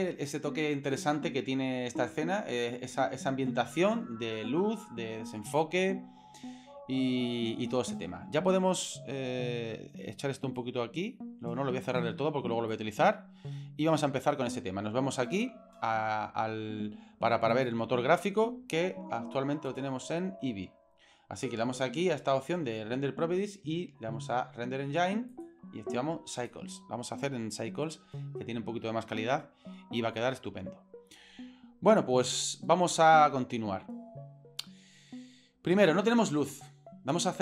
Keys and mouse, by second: 10.6-12.8 drag, 17.6 click, 19.7 click, 25.4-26.6 drag.